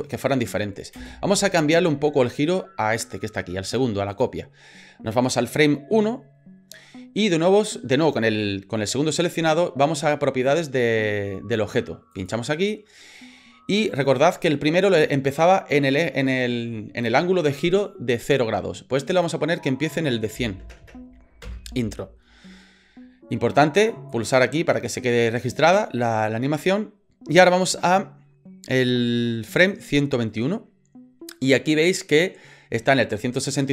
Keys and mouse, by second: 0.9 space, 4.1 click, 19.1-22.2 drag, 20.8 KP_0, 23.8 click, 24.1 click, 29.7 click.